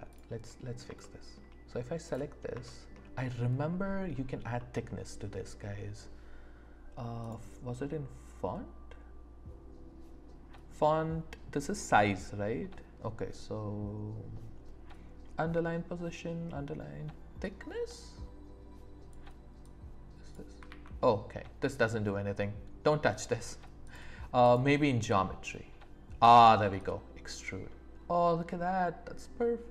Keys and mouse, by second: 0.1 click, 1.0 shift+middle click, 2.1 middle click, 2.6 shift+middle click, 4.5 click, 4.5 right click, 17.5-19.2 drag, 19.7 click, 20.7 ctrl+z, 23.9 click, 24.5 click, 26.9-29.7 drag.